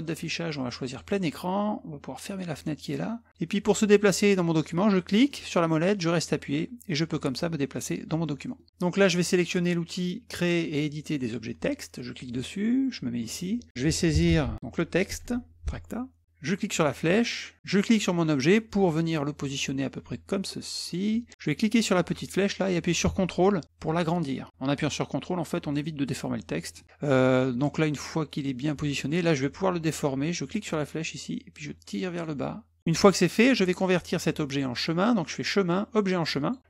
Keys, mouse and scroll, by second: 0.9 click, 2.3 click, 5.9-7.7 middle drag, 8.5 middle click, 12.1 click, 13.2 click, 13.8-15.1 typing, 16.5 click, 17.7-20.9 drag, 21.9-26.7 drag, 30.5-32.2 drag, 35.3 click, 36.4 click.